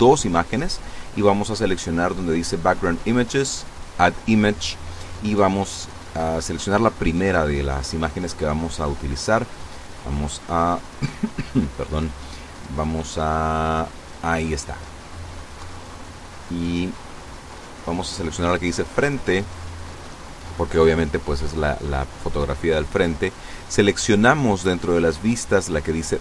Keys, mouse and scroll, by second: 0.0 click, 0.7-1.1 scroll down 1, 1.7 click, 2.5 scroll down 1, 3.3 click, 4.2-4.5 scroll down 1, 6.7 click, 12.9 click, 17.2 click, 18.4 click, 21.2 scroll down 1, 22.0 click, 24.1 click, 25.2 click.